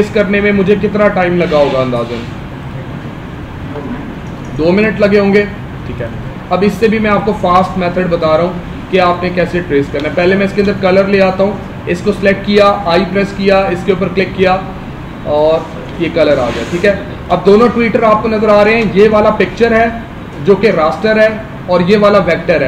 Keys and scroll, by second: 2.1 ctrl+alt+2, 9.9 space, 16.7 space, 18.4 space.